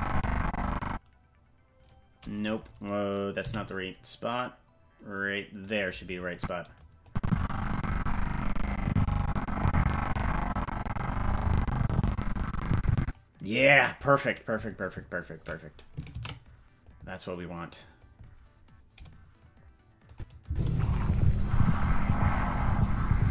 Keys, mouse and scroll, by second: 3.4 g, 6.3 click, 7.0-13.1 drag, 18.5 ctrl+s, 20.1 click, 20.4 space.